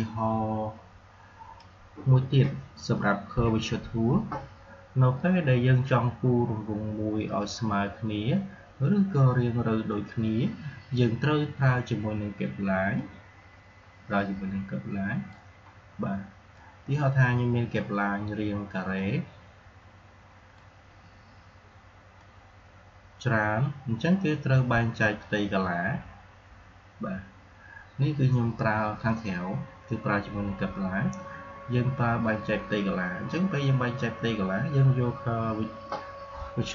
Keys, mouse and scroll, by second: 3.5 Delete, 12.9-22.1 drag, 22.4 click.